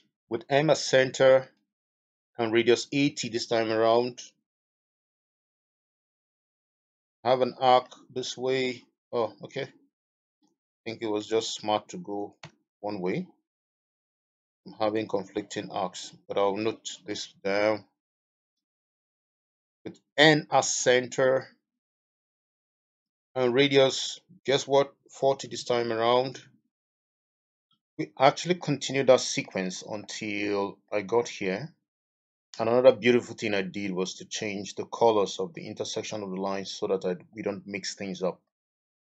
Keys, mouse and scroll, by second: 4.4 typing, 5.0 Return, 7.8 middle click, 10.8 middle click, 25.3-25.7 typing, 26.2 Return, 28.5 middle click, 30.8 middle click, 38.4 middle click.